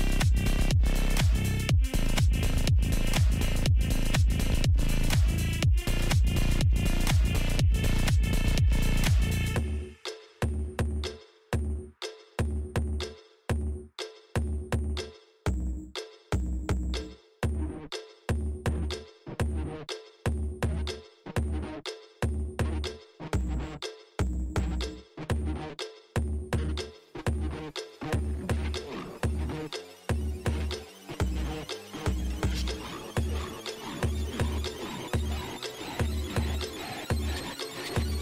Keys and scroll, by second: 10.3 alt+i, 15.1 alt+i.